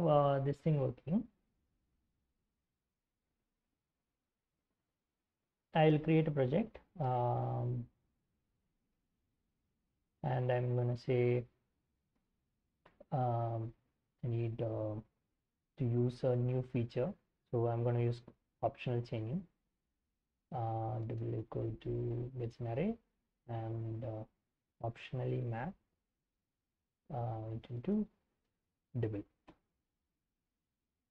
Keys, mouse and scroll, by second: 5.3-12.8 typing, 17.5-18.5 typing, 20.2-29.9 typing, 30.1 Return.